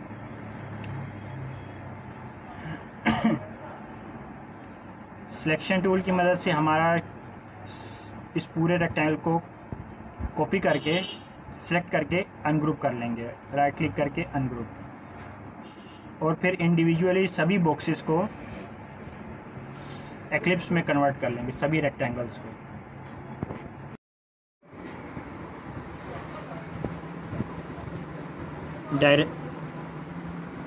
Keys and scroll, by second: 2.5 ctrl+=, 2.7 ctrl+=, 3.1 ctrl+=, 20.0 ctrl+a.